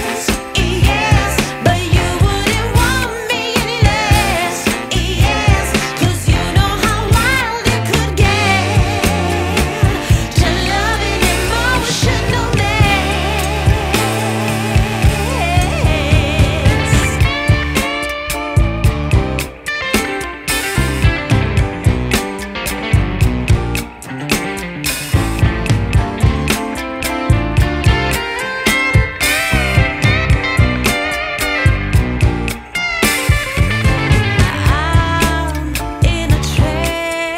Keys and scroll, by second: 0.8 b, 24.2 ], 31.6 v, 33.5 shift+super+n, 34.4 shift+super+Return, 35.6 z, 36.8 space.